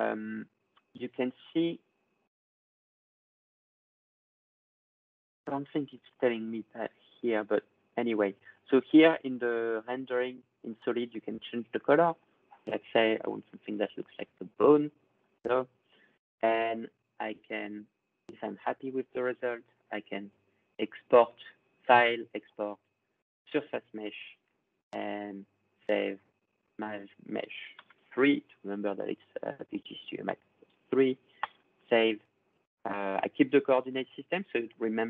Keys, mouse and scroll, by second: 1.5-4.5 drag, 4.6 click, 5.7 click, 6.8-10.9 drag, 11.1 click, 13.2 click, 14.0 click, 15.4 click, 17.4 click, 21.7 click, 23.7-25.7 drag, 26.6 click, 27.6 3, 31.2 click, 34.7-35.0 drag.